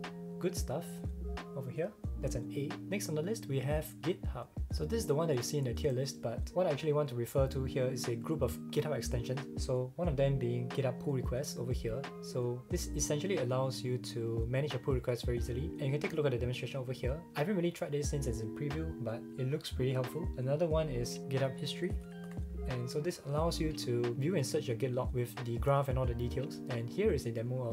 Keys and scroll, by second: 21.2-22.8 typing.